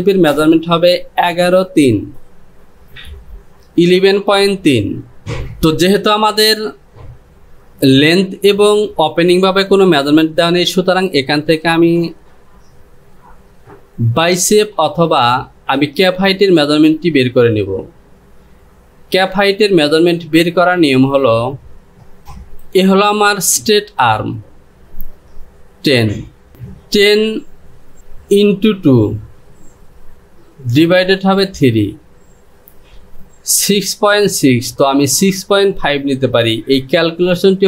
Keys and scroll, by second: 22.2 space.